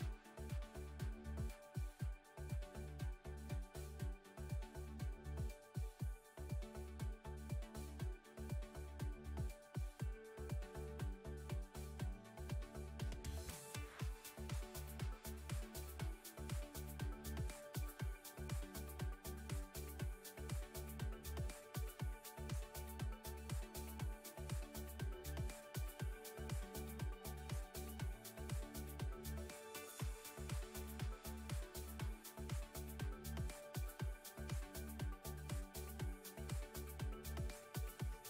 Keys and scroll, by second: 0.6 alt+z, 3.1 3, 4.6 2, 10.1 Tab, 11.9 alt+z, 17.5 Tab, 19.2 3, 20.4 2, 21.6 ctrl+r, 24.4 s, 25.2-26.5 shift+z, 26.5 z, 35.8 s.